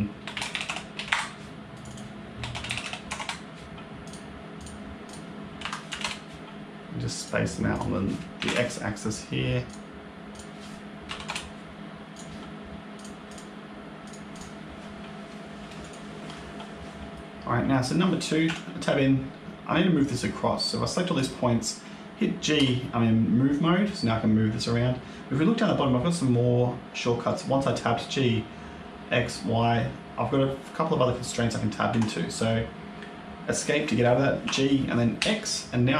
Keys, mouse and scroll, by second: 1.6 click, 1.8 click, 3.9 click, 4.5 click, 5.0 click, 7.1 click, 7.6 click, 9.6 click, 10.2 click, 12.0 click, 12.8 click, 13.2 click, 13.9 click, 14.2 click, 15.7 click, 18.4 Tab, 20.5 click, 22.4 g, 34.3 g.